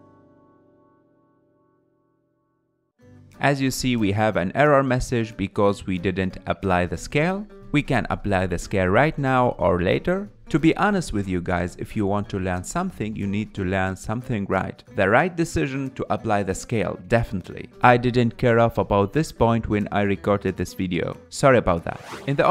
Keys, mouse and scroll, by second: 0.0 g, 4.1 ctrl+Tab, 11.5-13.1 scroll down 2, 14.2 click, 14.8-16.1 scroll up 6, 16.1-22.5 drag.